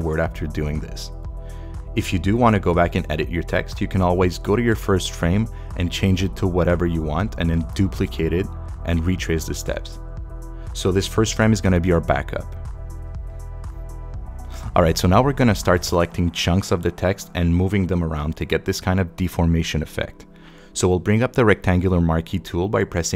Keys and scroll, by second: 22.7 m.